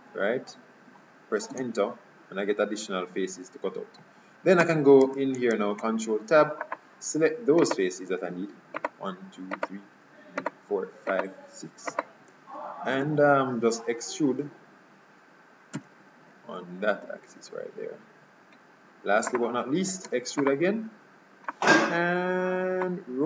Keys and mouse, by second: 4.7 Tab, 5.1 Tab, 7.8-8.8 drag, 13.1 KP_3, 15.9 e, 20.2 e, 21.6-23.2 drag.